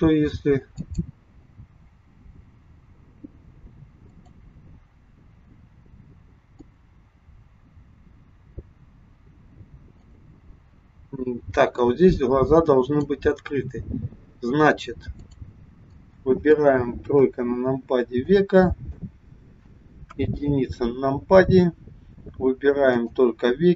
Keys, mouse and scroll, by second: 0.9 click, 4.1 click, 6.6 click, 8.6 scroll up 1, 10.1 click, 11.9 click, 15.3 click, 15.9 middle click, 17.3 KP_3, 18.1 click, 20.0 KP_1, 23.1 click.